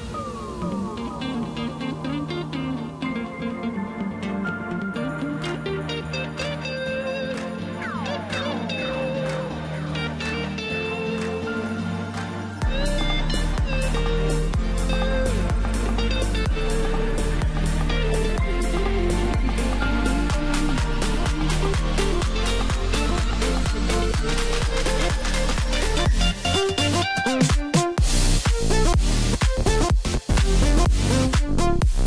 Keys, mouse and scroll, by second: 2.7 scroll up 2, 2.9 scroll down 3, 3.2 middle click, 4.0 click, 4.2-5.3 scroll up 2, 5.5 s, 7.4 KP_1, 8.4 g, 9.7-10.6 scroll down 5, 10.8 s, 12.2 e, 14.7 s, 16.1 Tab, 16.4 scroll up 2, 16.6 scroll down 4, 16.8-17.7 middle drag, 17.7-18.4 scroll up 3, 18.4-19.6 scroll down 3, 19.6 KP_Divide, 21.0 KP_7, 22.1 g, 24.2 KP_1, 25.7 s, 27.4-28.5 scroll up 1, 28.5 g, 30.9-31.2 scroll up 3, 31.2-32.0 middle drag.